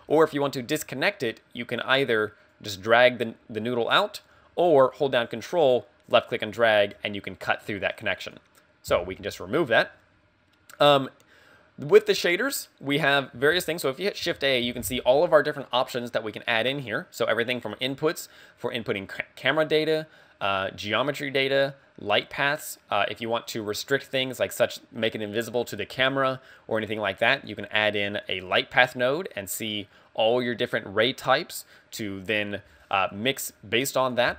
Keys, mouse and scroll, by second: 2.6 click, 5.7 ctrl+click, 8.3 click, 9.1 x, 10.9 click, 12.5 click, 13.6 shift+a, 14.4 shift+a, 28.4 click, 34.1 click.